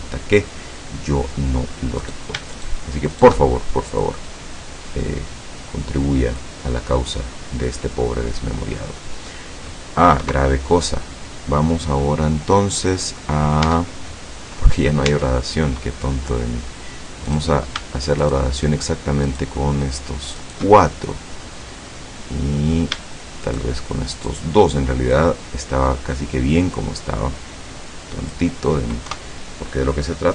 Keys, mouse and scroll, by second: 2.0 right click, 2.6 shift+right click, 3.1 shift+right click, 4.0-6.6 drag, 6.7-9.6 middle drag, 10.3 KP_0, 12.1 middle click, 13.7 Tab, 15.1 Tab, 15.7 middle click, 17.4 right click, 18.3 shift+right click, 19.4 shift+right click, 20.5 shift+right click, 20.8 shift+middle click, 23.5 shift+right click, 24.2 shift+right click, 25.2-28.6 drag, 29.2 KP_0.